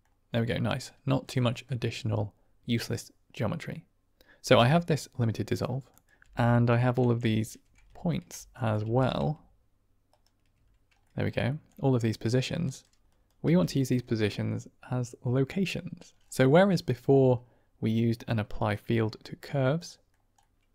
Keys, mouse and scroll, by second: 1.4 middle click, 4.3 g, 5.8 click, 6.1 g, 6.7 middle click, 7.9 ctrl+shift+click, 8.5 drag, 8.7 g, 10.0 ctrl+right click, 10.9 drag, 11.4 shift+drag, 12.6 middle click, 13.0 drag, 13.4 g, 16.4 middle click, 16.8 middle click, 18.2 click, 19.7 click, 20.3 click.